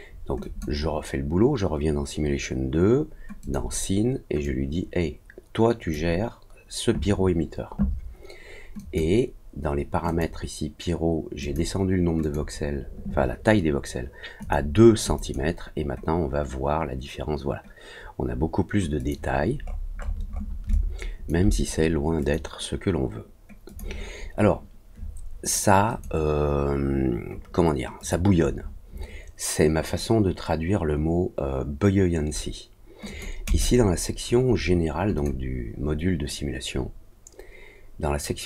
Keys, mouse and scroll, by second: 0.4 click, 3.4 click, 4.4-5.9 drag, 8.7 click, 10.0 click, 11.4 click, 12.2 click, 14.3 click, 15.1 click, 18.9 click, 19.5 middle click, 19.9 middle click, 19.9 scroll up 1, 20.2 middle click, 20.2 scroll down 1, 20.7 alt+click, 22.1 click, 23.6 click, 25.8 click, 27.9 click, 33.0 click, 33.4 click, 35.1 click.